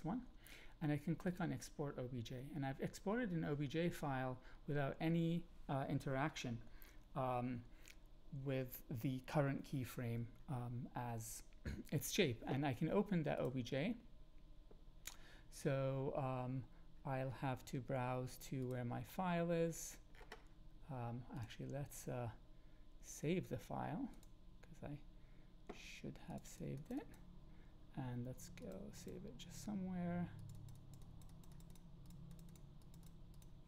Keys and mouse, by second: 13.4-18.0 drag, 23.1-24.2 drag.